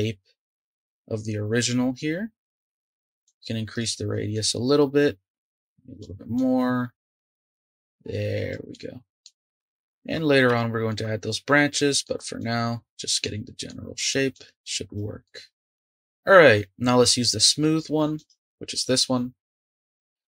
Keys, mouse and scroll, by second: 3.2 click, 4.3-8.7 drag, 8.7 middle click, 9.4 click, 9.7-12.4 shift+middle drag, 12.4 click, 13.2-14.3 middle drag, 14.3 click, 15.2-18.1 middle drag, 18.1-20.2 drag.